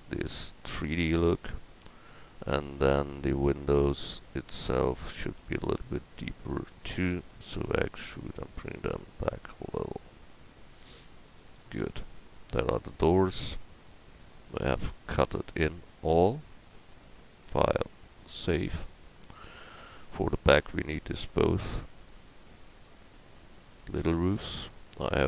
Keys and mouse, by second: 1.4-7.6 right drag, 7.6 e, 11.0 Tab.